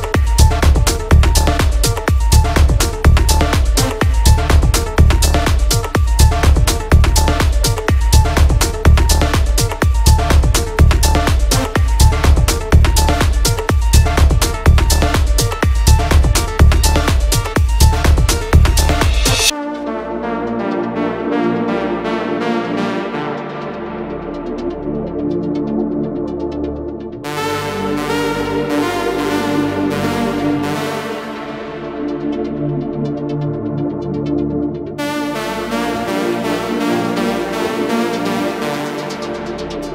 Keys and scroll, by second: 6.1 F3, 6.6 Escape, 7.8 shift+F2, 8.4 F3, 17.2 F2, 17.9 shift+F2, 18.3 Escape, 37.8 KP_Add.